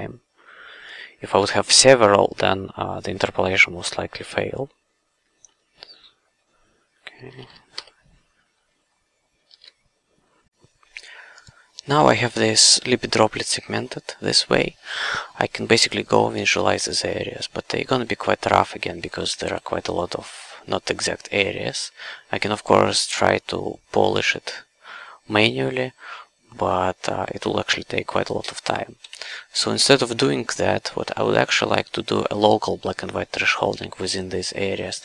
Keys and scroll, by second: 1.3 f, 5.4 f, 7.7 l, 9.5 shift+a, 19.1 w, 29.0 c, 30.6 q.